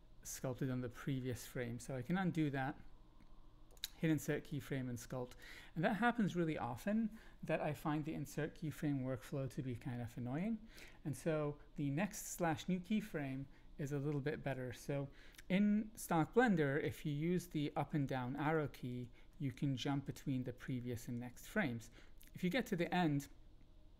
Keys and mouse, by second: 2.3 ctrl+z, 3.6 click, 4.5 click, 16.9 Down, 17.0 Down, 18.0 Up, 18.5 Down, 18.9 Down, 19.3 Up, 19.5 Up, 20.0 Down, 20.2 Down, 21.1 Up, 21.3 Up, 21.8 Down, 22.4 Down, 22.8 Down.